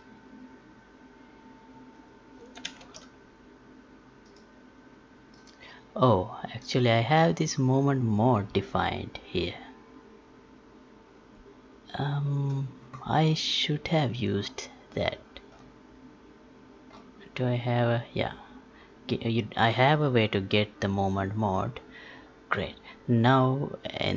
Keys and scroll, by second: 2.8 ctrl+z.